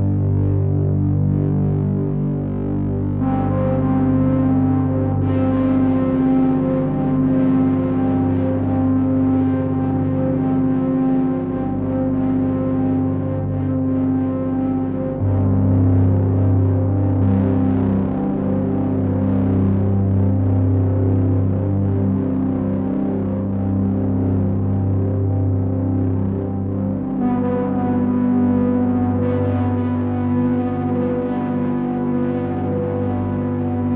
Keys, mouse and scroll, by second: 0.6 click, 0.6-1.3 scroll down 1, 1.3-1.8 scroll down 3, 2.7 click, 5.2 click, 6.3-7.6 scroll up 6, 7.6 click, 14.2-15.6 scroll down 7, 15.6 click, 15.6-16.9 scroll down 1, 16.9 click, 19.8 middle click, 24.0 click, 27.6 click, 32.3 click.